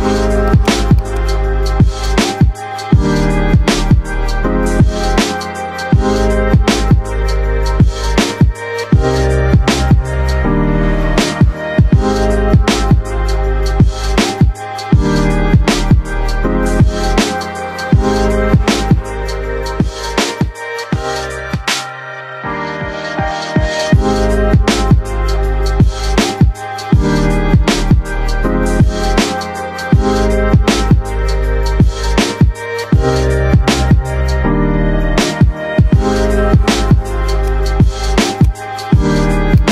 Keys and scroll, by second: 2.5 shift+Home, 3.7-8.1 typing, 6.6 Return, 11.6-14.8 typing, 15.2 Return, 17.2-25.3 typing, 27.1-36.1 typing, 38.8 F3.